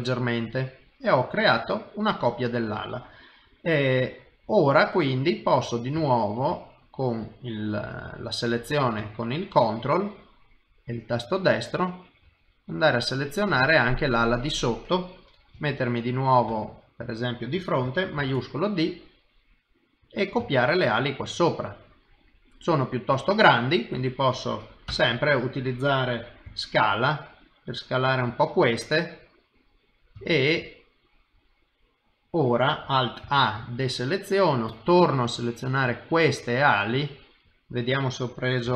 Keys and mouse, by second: 0.5 middle click, 3.9 middle click, 6.0 shift+middle click, 6.6 middle click, 9.1 ctrl+right click, 13.7 middle click, 15.5 KP_3, 16.5 KP_1, 18.2 shift+d, 20.4 shift+middle click, 20.9 middle click, 24.9 KP_1, 26.4 s, 29.1 middle click, 30.2 shift+middle click, 30.7 middle click, 33.2 alt+a, 33.6 ctrl+right click, 36.0 middle click, 38.6 g.